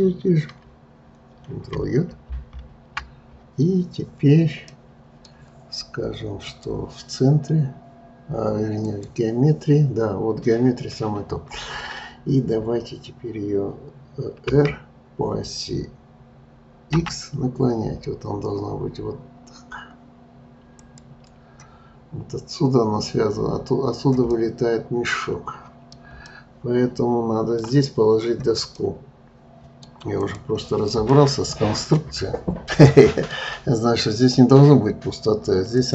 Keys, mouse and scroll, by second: 2.2 ctrl+j, 4.7-6.4 middle drag, 6.4-9.5 drag, 14.5 r, 24.3-30.2 middle drag, 30.2 click, 31.1-34.1 middle drag.